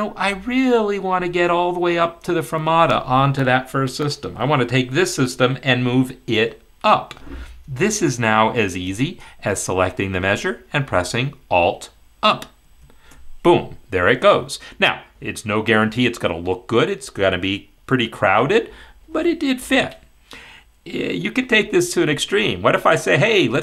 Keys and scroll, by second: 12.6 alt+Up.